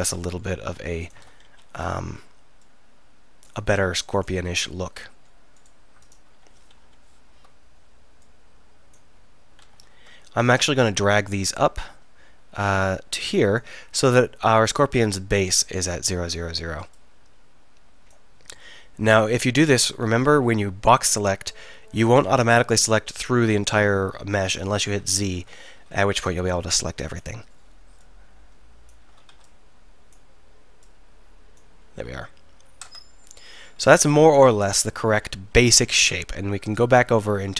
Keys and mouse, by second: 1.1 click, 1.5 KP_1, 5.6-6.8 middle drag, 6.8 KP_1, 9.7 a, 9.9 a, 12.6 click, 16.3 a, 16.7 b, 22.5 KP_1, 24.9 z, 25.4 a, 25.9 b, 29.2 a, 29.4 b, 32.0 z, 32.9 Tab, 35.8 KP_1.